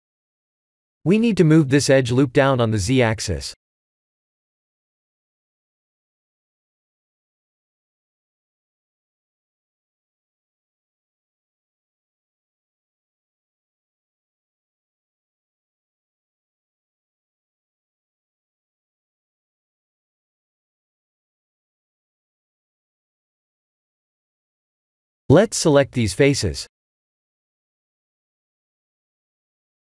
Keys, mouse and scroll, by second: 0.8 e, 2.1 middle click, 5.1 KP_3, 5.7 shift+z, 7.4 click, 8.4 click, 11.1 middle click, 11.9 Tab, 12.2 middle click, 12.6 shift+z, 12.9 middle click, 17.6 click, 19.2 middle click, 22.3 middle click, 23.7 click, 24.4 Tab, 25.3 3, 25.4 click, 26.3 shift+click, 26.6 middle click, 27.5 shift+click, 27.9 middle click, 28.8 shift+click, 29.2 middle click.